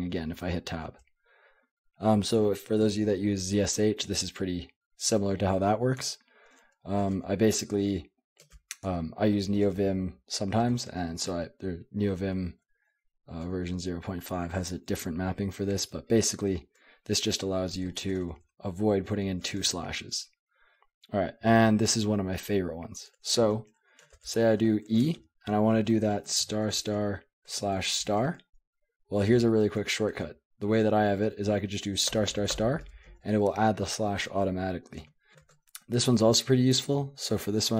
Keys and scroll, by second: 0.3 Tab, 0.8 Tab, 6.0 Escape, 6.3-8.4 typing, 8.8 Escape, 9.6 shift+v, 10.9 Escape, 11.8-18.1 typing, 19.6 Escape, 19.6-22.0 typing, 24.1-25.0 typing, 26.3-28.0 typing, 29.9-30.6 typing, 32.1-33.2 typing, 35.0 Escape, 35.4 typing.